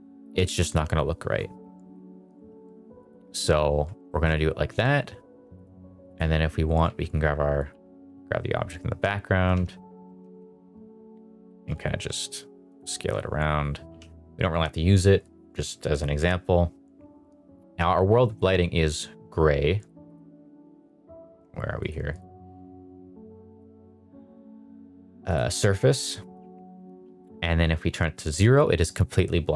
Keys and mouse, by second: 0.6 KP_0, 2.9 click, 4.0 shift+middle drag, 6.8 s, 7.5 click, 7.8 g, 7.9 y, 9.5 Escape, 9.9 g, 10.2 z, 11.6 s, 13.9 h, 18.3 click, 19.7 click, 20.1 click, 22.0 click, 23.5 click, 23.9 drag, 25.2 click, 26.3 click.